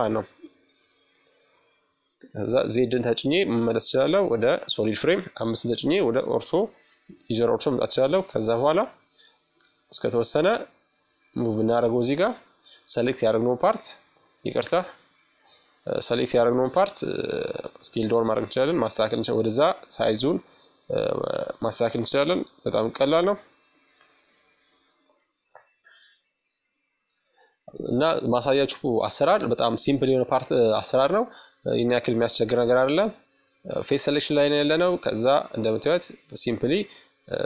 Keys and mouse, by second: 0.3 z, 1.7-3.2 middle drag, 2.7 KP_5, 5.5-7.3 drag, 7.3-9.7 middle drag, 10.3 shift+super+click, 15.1-18.0 middle drag, 17.7-19.5 drag, 18.8 Tab, 20.5-22.3 drag, 24.0-25.8 middle drag, 26.0-27.8 right drag, 26.9 Tab, 29.4-31.2 right drag, 30.2-31.9 middle drag, 31.4-33.5 drag, 36.4-37.4 drag.